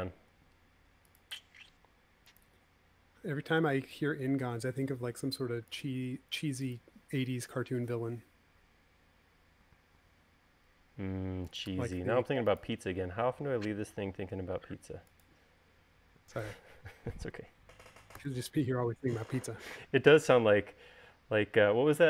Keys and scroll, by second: 1.2 l, 19.0 u.